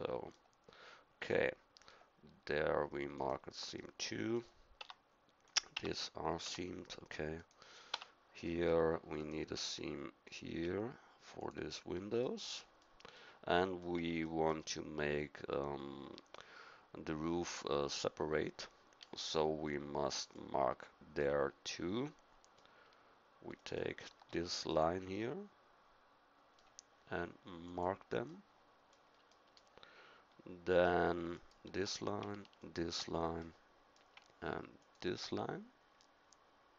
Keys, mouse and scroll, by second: 0.1 middle click, 4.8 Tab, 5.7 Tab, 6.4 Tab, 7.9 Tab, 8.4-10.6 middle drag, 14.4-16.9 middle drag, 21.2 middle click, 23.5-25.7 middle drag, 27.6 click, 28.3-29.5 middle drag, 33.4-35.5 middle drag.